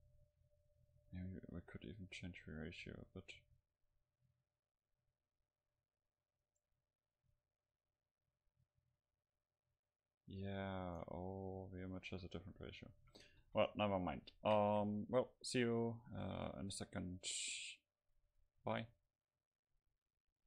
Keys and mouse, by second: 1.1-3.6 drag, 3.6-5.9 middle drag, 4.9-9.5 drag, 4.9-5.9 right drag, 11.9-13.0 typing, 13.5 ctrl+s.